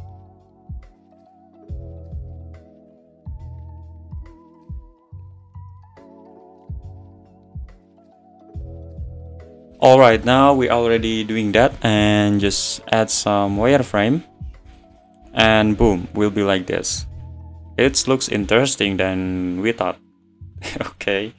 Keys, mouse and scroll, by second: 0.2 ctrl+r, 0.5 click, 0.7 ctrl+r, 1.3 click, 1.6 ctrl+r, 2.1-3.2 middle drag, 3.2 Tab, 3.3 click, 3.4 middle click, 3.6 click, 3.7 middle click, 4.0 Tab, 4.4 click, 4.5 middle click, 4.9 click, 5.7 middle click, 5.8 `, 6.1 `, 6.6 click, 6.7 middle click, 7.4 click, 7.7 middle click, 7.9 `, 8.2 Tab, 8.3 click, 8.4 `, 8.9 click, 9.0 middle click, 9.1 scroll down 1, 9.1 middle click, 9.3 click, 9.6 click, 10.2 click, 12.4 click, 14.0 click, 15.0-18.3 middle drag, 18.3 scroll down 2, 18.5-18.9 middle drag, 18.9 click, 20.1 click, 20.7 `.